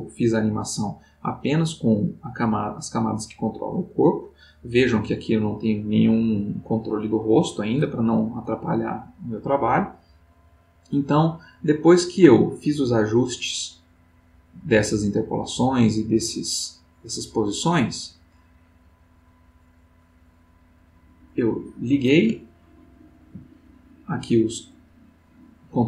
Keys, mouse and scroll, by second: 9.3-19.7 drag, 21.2 click, 22.4-23.5 ctrl+middle drag, 25.3-25.8 drag.